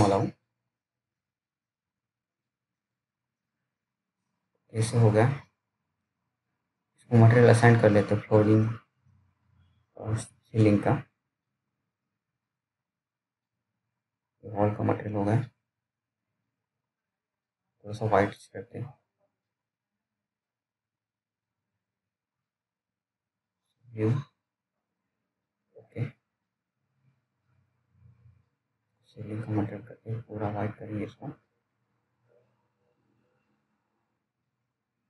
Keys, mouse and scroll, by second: 0.3 scroll down 1, 0.6-1.3 scroll up 1, 1.3 middle click, 2.5 scroll down 1, 4.0 right click, 4.8 click, 5.2-5.5 scroll up 1, 5.5 click, 5.9-6.4 scroll down 1, 6.5 alt+middle click, 7.2-7.5 scroll up 1, 7.5 middle click, 8.7 p, 10.3 click, 14.4-14.8 scroll down 1, 14.8 middle click, 15.7 scroll up 1, 16.3 click, 25.9 scroll up 1, 26.2 click.